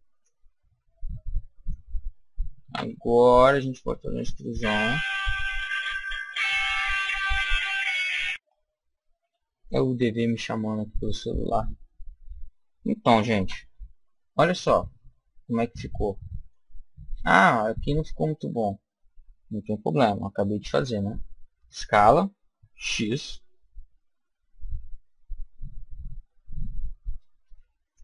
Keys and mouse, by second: 0.1-1.8 drag, 2.6 e, 5.5-8.4 drag, 13.3 Tab, 14.3-16.1 middle drag, 18.4 Tab, 21.4 s.